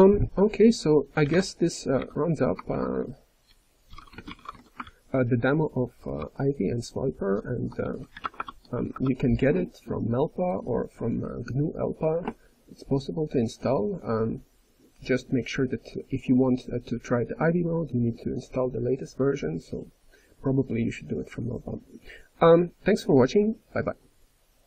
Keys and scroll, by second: 2.4-3.1 typing, 4.8-9.1 ctrl+n, 6.1 ctrl+p, 8.2 alt+BackSpace, 8.8 BackSpace.